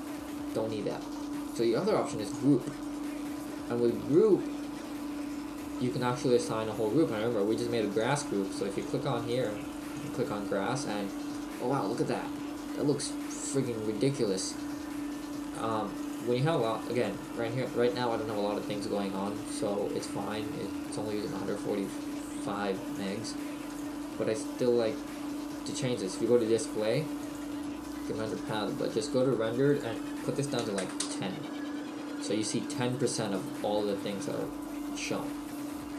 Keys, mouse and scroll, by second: 2.4 click, 11.5 middle click, 17.3 click, 27.2 click, 33.4 middle click.